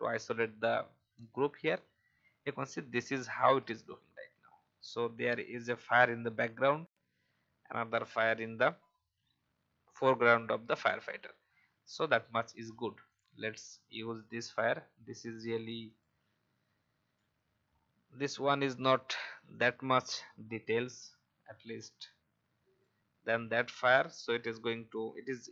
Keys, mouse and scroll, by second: 5.4 alt+scroll down 1, 13.1 click, 17.5-17.8 scroll up 1, 19.5 alt+shift+click.